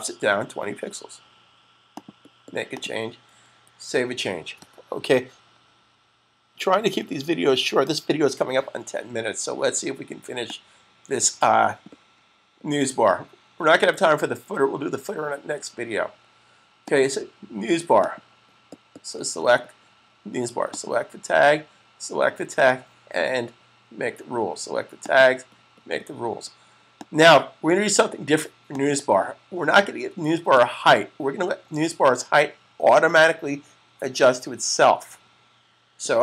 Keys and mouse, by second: 1.8 click, 3.4 super+s, 10.4 click, 16.7 click, 20.7 click, 25.8 click.